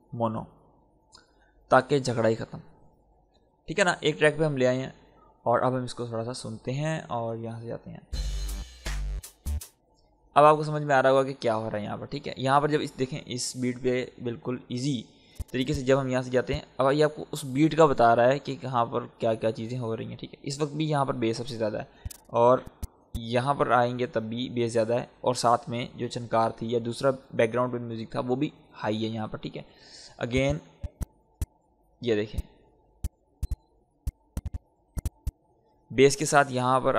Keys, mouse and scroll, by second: 2.7-4.8 scroll down 1, 5.8 scroll up 1, 6.9 click, 8.0 space, 11.7-13.3 scroll up 1, 13.3 click, 13.8-15.0 scroll up 1, 15.0-21.7 drag, 21.7-27.4 drag, 30.0-36.9 drag.